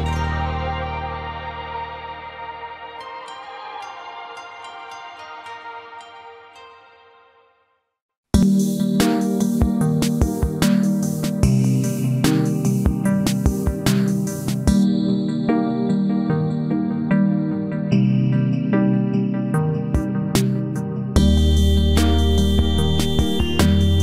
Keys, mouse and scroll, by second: 16.8 alt+t, 20.1 alt+x.